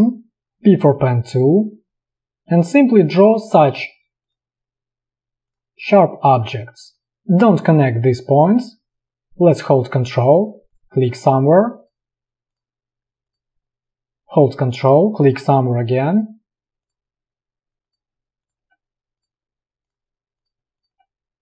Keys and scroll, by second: 0.5 p.